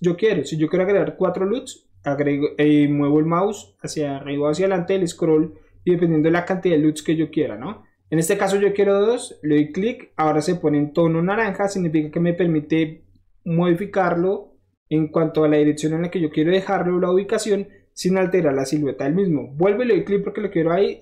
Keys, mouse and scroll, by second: 9.5 click, 19.8 click.